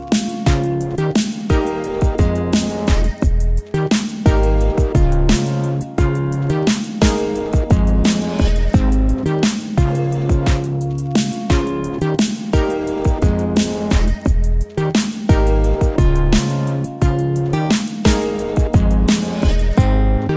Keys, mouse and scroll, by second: 2.2 right click, 3.5 click, 6.3 shift+Num_Lock, 6.7 shift+click, 17.8 v, 19.0 ctrl+a.